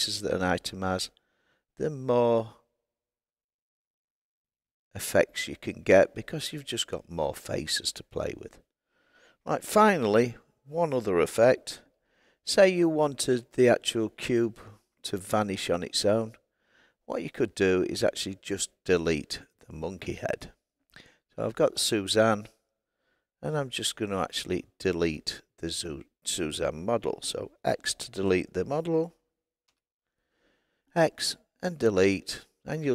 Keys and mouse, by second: 12.1 g, 14.7 click, 20.0 click, 21.6 click, 29.6 x.